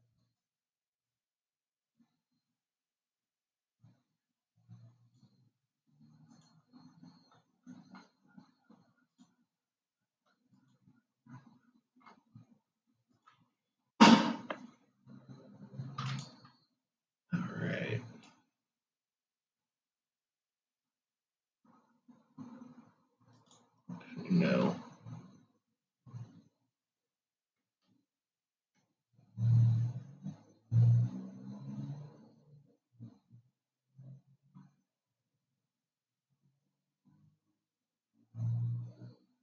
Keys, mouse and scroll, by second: 9.4-11.2 drag, 13.3 click, 16.3 click, 18.5 click, 27.1-30.3 drag, 33.8-35.2 scroll up 2, 35.2-37.0 scroll down 2, 37.0-39.4 drag.